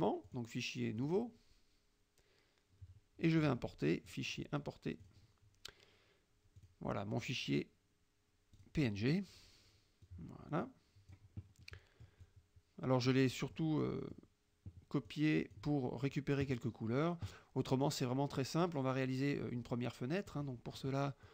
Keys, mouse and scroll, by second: 0.4 click, 1.1 click, 4.1 click, 5.1 click, 6.6 click, 8.6 click, 10.1-11.3 drag, 11.6 middle click, 12.3-13.3 drag, 13.4 middle click, 14.1 middle click, 15.1-15.8 drag, 20.4 click.